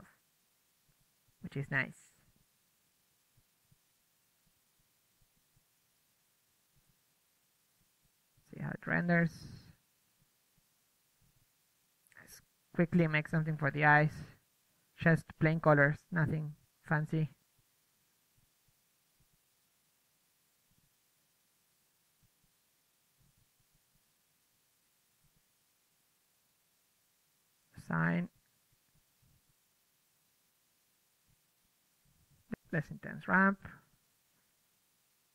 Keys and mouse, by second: 0.0 Escape, 1.2 click, 1.4 z, 1.9 z, 4.6-6.0 drag, 5.8-6.4 middle drag, 6.4-7.3 drag, 7.7-8.3 drag, 8.3 Tab, 8.4 Tab, 9.4-10.0 drag, 10.0-11.7 right drag, 10.6 drag, 12.7 right click, 13.2 click, 14.7 Tab, 15.1 a, 15.2 a, 15.4 ctrl+Tab, 16.1 l, 17.4 g, 18.1-20.7 drag, 19.3 Tab, 21.1-22.7 drag, 23.8 click, 25.6-26.6 drag, 27.6 Tab, 27.7 Tab, 28.1-29.5 middle drag, 29.8 click, 30.4 a, 30.5 a, 31.5 a, 31.7 a, 32.6-33.6 drag, 33.9-34.7 middle drag, 34.2 shift+b, 34.7 ctrl+w.